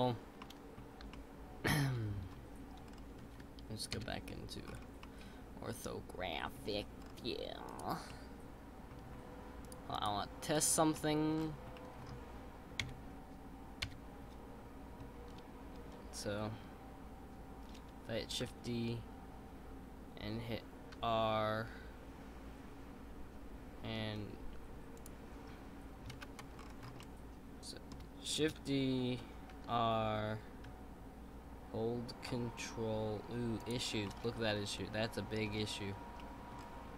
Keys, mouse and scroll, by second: 0.4 middle click, 1.0 scroll up 1, 1.1 shift+middle click, 2.0-2.8 scroll up 2, 2.8-3.9 scroll down 4, 3.9 KP_5, 4.6-5.0 scroll up 4, 5.0-6.8 middle drag, 6.8-7.7 scroll down 4, 8.1-9.3 drag, 8.1 middle click, 9.9 click, 10.6 drag, 10.9-11.3 middle drag, 11.3-11.7 scroll down 3, 11.7-12.8 middle drag, 12.8 KP_1, 18.4 shift+d, 26.1 ctrl+z, 26.5-27.0 scroll up 2, 27.0-28.4 shift+middle drag, 28.4 shift+d, 34.0-35.5 middle drag, 35.5-36.2 scroll up 3, 36.2-36.5 middle drag, 36.5-36.9 scroll down 2.